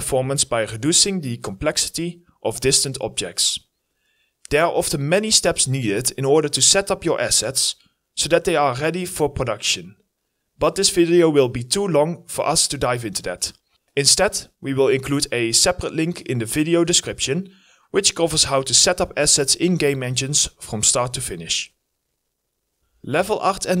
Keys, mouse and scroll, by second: 1.7-2.6 scroll up 1, 18.8 right click, 18.9-22.4 typing, 19.3-19.7 scroll up 1, 19.7 scroll down 1, 22.9 right click, 23.7 right click.